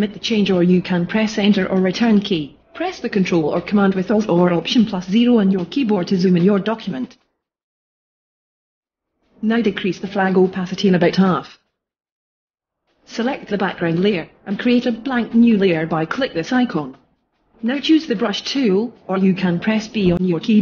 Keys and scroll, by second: 2.7 alt+super+0, 6.5 super+-.